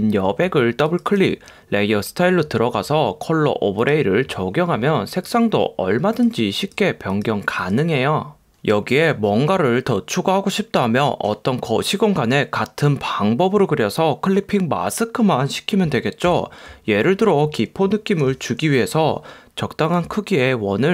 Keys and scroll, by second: 16.4 super+=, 18.3 u.